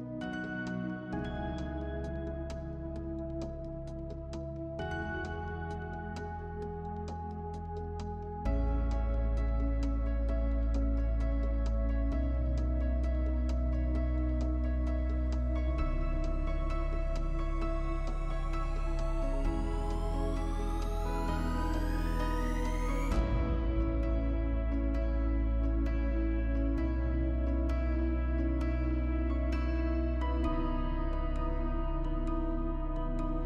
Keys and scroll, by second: 19.1 space.